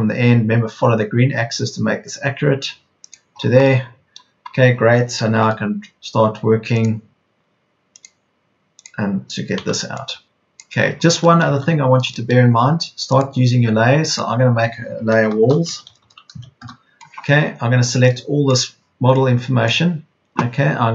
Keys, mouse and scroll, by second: 9.5 p, 11.7 Escape, 15.2-16.7 typing, 20.1 Return.